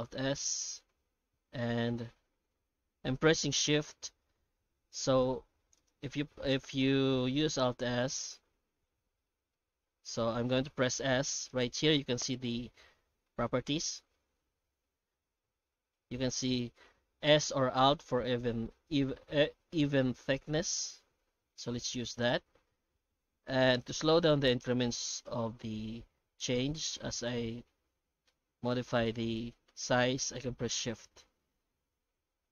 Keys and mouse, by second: 4.8 alt+s, 6.9 shift+middle click, 7.7 alt+s, 14.2 alt+s.